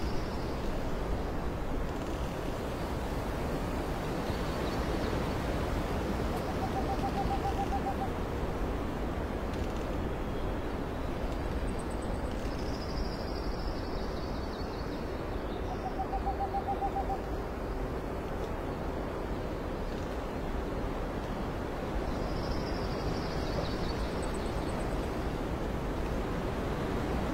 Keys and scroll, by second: 2.8 space, 3.1 s, 3.2 space, 5.0 alt+space, 6.8 alt+x, 8.0 space, 9.4 space, 11.2 x, 12.2 space, 14.3 ctrl+alt+z, 16.5 space, 18.4 space, 21.5 space, 22.2 alt+space, 23.2 space, 24.3 space.